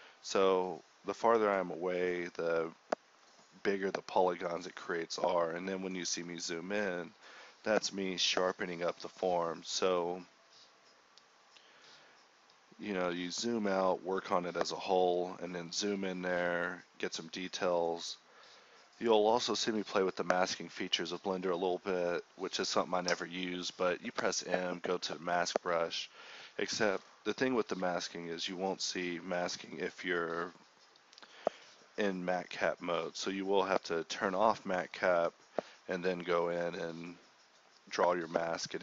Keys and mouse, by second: 0.0 ctrl+z, 11.1-11.8 drag, 15.0-16.8 drag, 19.0-20.1 drag, 21.3-22.0 middle drag, 23.0-24.3 drag, 25.9-26.3 drag, 26.3 KP_1, 26.7-27.2 middle drag, 28.4-29.6 drag, 30.5-32.2 drag, 32.7-33.1 middle drag, 36.4 click, 37.0-38.8 drag.